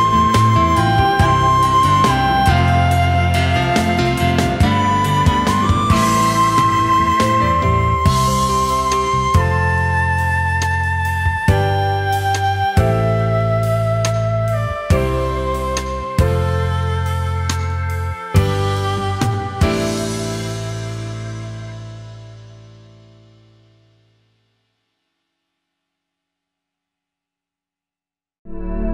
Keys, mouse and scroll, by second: 20.2 space.